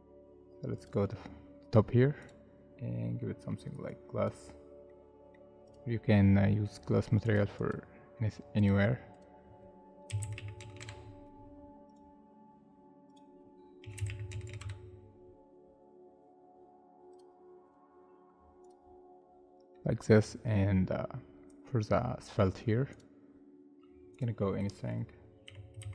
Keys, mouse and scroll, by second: 2.8 scroll up 1, 3.2 middle click, 7.6 double click, 10.1-11.1 typing, 13.8-14.8 typing, 19.2 middle click, 25.5 F3, 25.8-25.9 typing.